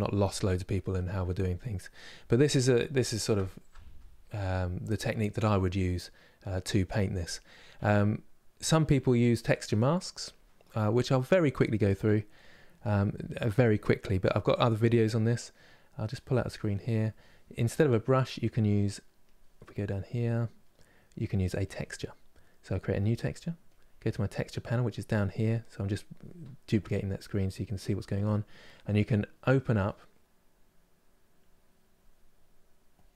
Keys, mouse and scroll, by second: 13.3-22.8 drag, 31.7-33.0 drag.